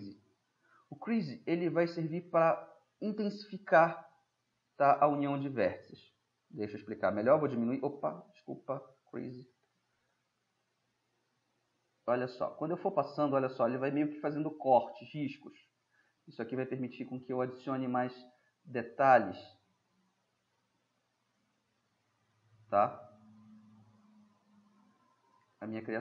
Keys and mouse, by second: 0.8-3.2 middle drag, 5.4 middle click, 6.8 p, 7.7 p, 7.7 [, 7.9 [, 12.6-13.3 middle drag, 17.0-20.9 middle drag, 20.9 drag, 20.9 middle click, 21.7-24.2 middle drag, 24.2-25.5 drag, 25.5-26.0 middle drag.